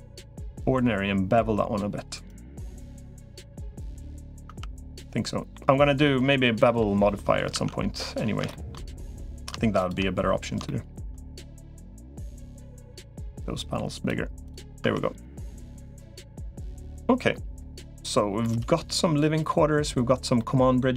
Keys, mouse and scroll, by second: 2.6 middle click, 4.3 Tab, 4.8 middle click, 5.8 middle click, 6.8 middle click, 8.3 shift+middle click, 8.9 3, 9.1 click, 10.4 shift+middle click, 11.5-13.9 drag, 14.7 Tab, 18.2-19.3 middle drag, 20.2 middle click.